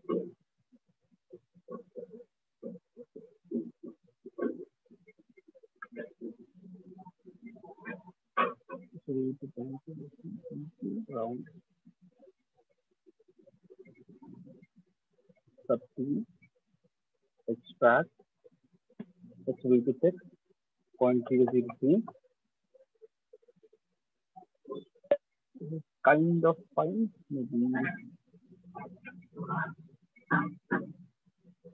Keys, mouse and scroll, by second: 2.0 click, 4.0 click, 5.2 right click, 5.9 shift+click, 6.0 shift+click, 6.4 alt+click, 7.1 right click, 8.2 click, 9.0 shift+click, 9.1 click, 11.6 right click, 12.0 click, 13.0 right click, 13.5 shift+click, 13.7 shift+click, 14.1 alt+click, 15.0 click, 16.2 click, 16.9 click, 17.6 shift+click, 18.2 click, 19.9 click, 20.2-21.7 typing, 22.8 click, 23.1 typing, 28.6 click, 29.9 click, 31.1 click.